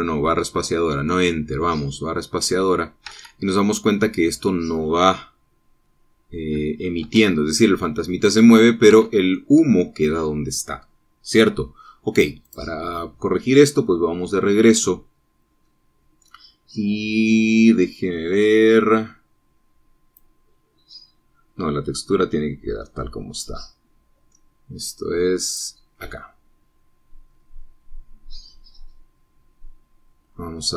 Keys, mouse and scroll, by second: 4.1 Escape, 6.3-8.1 middle drag, 8.2 space, 10.0 Escape, 10.4-13.5 middle drag, 13.5 click, 17.7-18.6 scroll down 1, 20.7 scroll down 1, 21.3 click, 23.0-24.7 drag, 26.6 click, 28.1-28.8 scroll down 2, 29.2-30.7 scroll down 3.